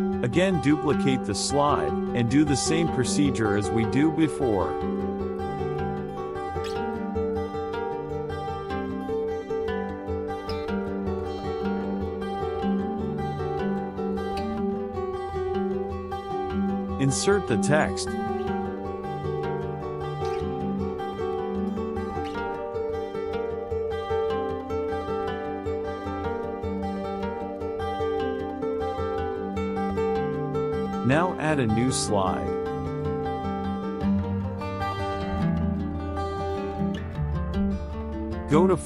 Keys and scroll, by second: 1.6 KP_Subtract, 4.8 BackSpace, 6.2 BackSpace, 16.4 ctrl+v, 24.2 Right, 32.7 KP_Subtract, 35.4 ctrl+a, 35.7 BackSpace.